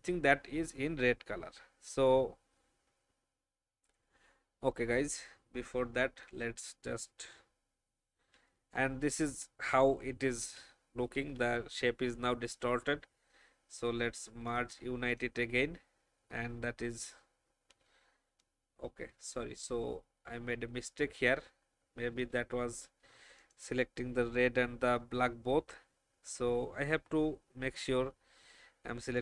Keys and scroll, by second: 0.6 v, 10.5 v, 11.1 ctrl+a, 18.7 ctrl+z.